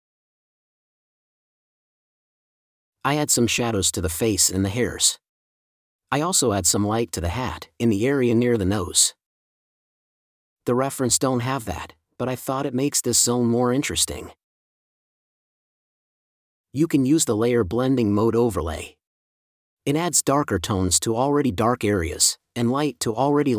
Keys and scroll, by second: 1.6 space, 4.6 space, 7.7 space, 10.2 space, 12.3 space, 14.9 space, 16.1 4, 18.7 space.